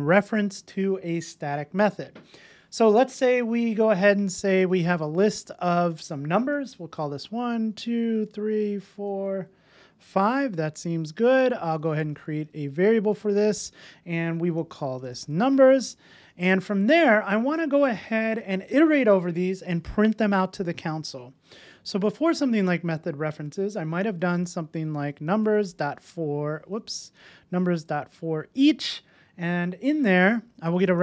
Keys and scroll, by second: 5.4 Return, 12.2 Return, 24.8 Return, 26.8 super+z, 28.4 Return.